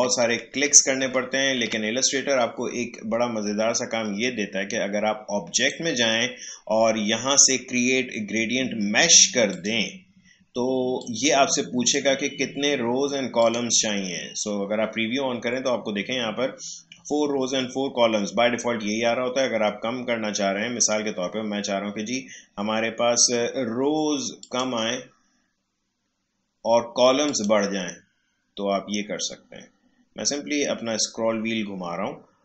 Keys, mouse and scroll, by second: 5.6 click, 9.5-13.4 drag, 24.4 click, 25.0-27.2 scroll down 1, 27.2 click, 28.1-31.0 scroll up 1.